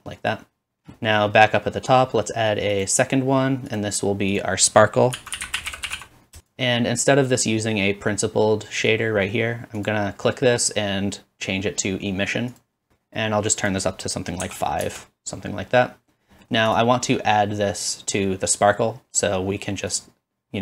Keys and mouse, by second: 6.5-12.1 drag, 9.9-16.8 middle drag, 9.9-12.1 right drag, 16.8-20.6 drag, 20.0-20.6 middle drag, 20.0-20.6 right drag.